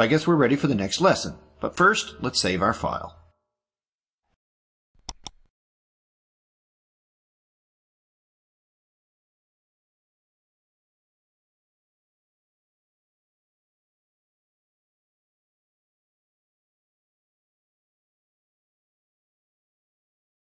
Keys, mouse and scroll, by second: 5.0 click, 6.0 click, 7.7 click, 10.1 click, 11.6-13.0 typing, 14.8-16.8 drag.